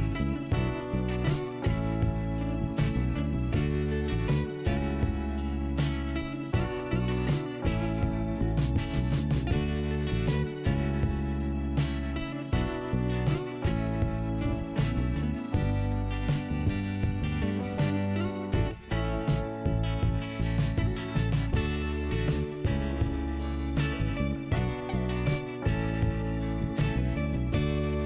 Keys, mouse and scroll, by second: 1.0 click, 4.5 click, 5.4 click, 7.8 click, 7.9 click, 8.7 scroll down 1, 10.1 click, 12.0 click, 17.7 click, 18.8 click, 19.4 click, 19.5 click, 23.2 click, 23.4 click, 24.2 click, 24.7 scroll down 1, 25.4-26.0 scroll up 1, 26.0 click, 27.5 click.